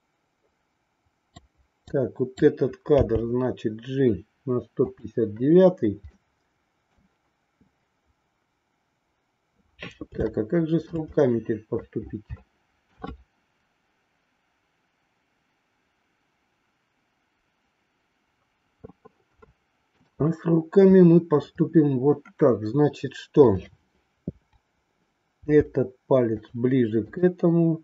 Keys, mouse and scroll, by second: 1.8 click, 2.9 g, 6.1 middle click, 10.3 shift+middle click, 11.2 middle click, 12.4 shift+middle click, 19.4 shift+middle click, 23.6-24.8 drag, 25.3 r, 27.0-27.8 drag.